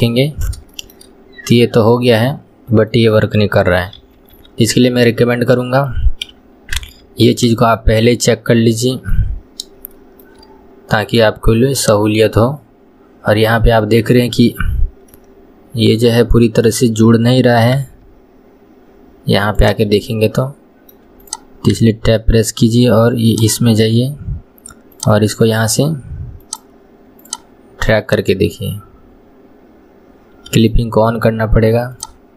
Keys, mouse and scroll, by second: 0.3 scroll up 1, 0.8-1.3 shift+middle drag, 1.3 scroll down 1, 1.6-4.5 middle drag, 4.5 ctrl+z, 4.8 ctrl+z, 6.3 KP_2, 6.9 Tab, 7.4 click, 7.8-9.5 middle drag, 9.5-10.0 scroll up 2, 10.0-11.8 shift+middle drag, 11.8 click, 13.7-14.8 middle drag, 14.8 scroll down 1, 15.2-17.8 middle drag, 17.8 KP_1, 18.7-19.7 scroll up 2, 19.7 click, 20.1-21.3 middle drag, 21.3 click, 23.4 click, 24.2 scroll up 2, 25.0 click, 26.5-28.2 drag.